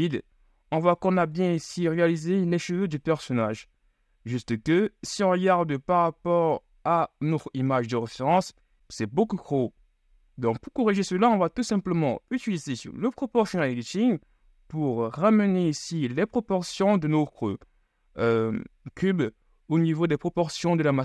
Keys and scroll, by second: 8.2 z.